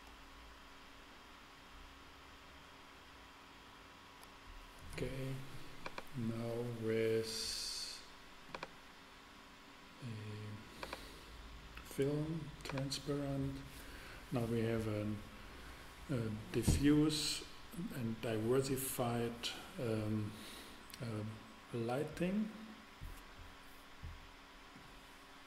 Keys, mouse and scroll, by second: 5.8-7.8 drag, 8.5-10.3 drag, 10.8-12.6 drag.